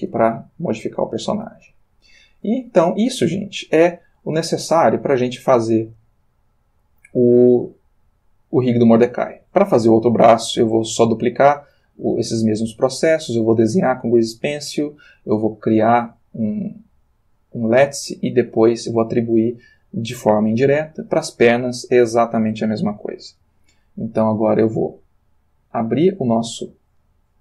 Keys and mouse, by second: 0.2-1.6 ctrl+middle drag, 1.9 shift+middle click, 3.1 click, 3.8 g, 6.9 Escape, 16.2 click, 26.4 click.